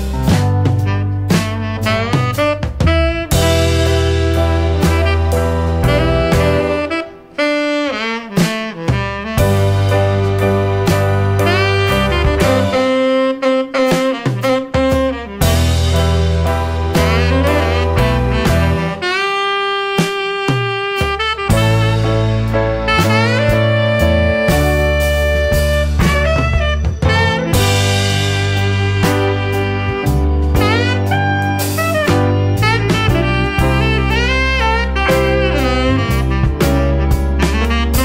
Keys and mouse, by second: 0.7 middle click, 1.3 click, 2.4 click, 3.8 click, 5.4 click, 5.7-6.7 drag, 7.0 middle click, 8.3 middle click, 8.8-9.9 drag, 10.2-11.7 drag, 12.4 shift+a, 18.9-21.1 drag, 22.7-25.6 drag, 27.3-30.0 drag, 31.6-33.6 drag, 35.3-36.2 middle drag.